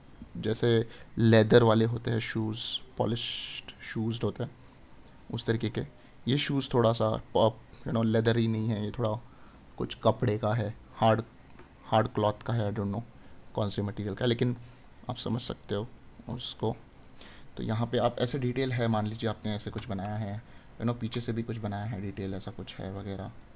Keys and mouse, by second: 19.3 right click.